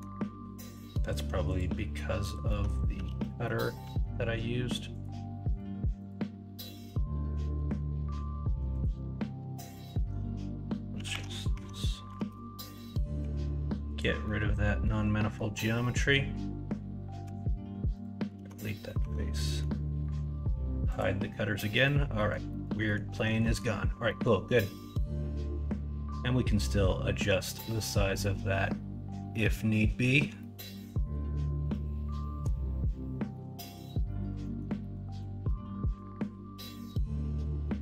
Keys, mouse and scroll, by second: 2.4 middle drag, 3.0 alt+z, 3.4 middle click, 3.8 alt+z, 7.4 middle click, 11.1 ctrl+a, 11.5 Tab, 12.2 alt+z, 12.6 middle click, 13.4 middle click, 14.2 middle click, 15.1 middle click, 17.2 x, 18.3 alt+z, 18.8 middle click, 19.4 middle click, 21.3-22.3 middle drag, 22.4 middle drag, 22.8 middle click, 23.1 middle drag, 23.4 middle drag, 24.0 middle drag, 24.9-26.1 middle drag, 30.3-30.7 middle drag, 31.7-32.4 middle drag, 34.0 middle click, 34.4 middle drag, 34.8 middle click, 35.4-35.9 middle drag, 37.5 alt+z.